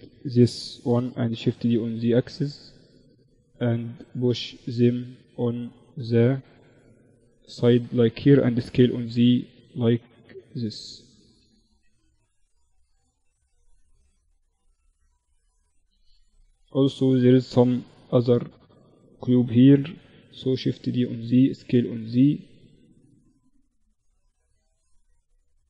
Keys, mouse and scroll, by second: 0.1 shift+d, 1.7 z, 2.9-4.9 drag, 6.4-8.3 drag, 7.9 s, 9.5-11.3 drag, 10.6 Tab, 11.6 ctrl+r, 12.9 z, 13.3 Tab, 13.7 z, 14.2 z, 14.9 z, 18.9 shift+d, 20.8 s, 23.3-25.1 drag.